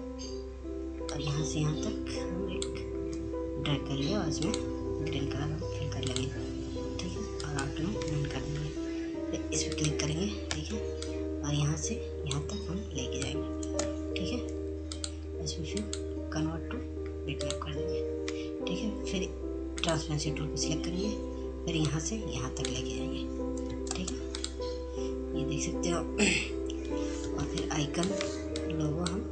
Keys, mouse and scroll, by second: 7.1-9.5 right drag, 9.5-12.6 drag, 12.6 ctrl+space, 13.3 click, 13.5 click, 18.1-22.3 drag, 22.3 ctrl+space, 22.8 click, 23.2 scroll down 1, 25.8 F2, 26.1-29.3 drag.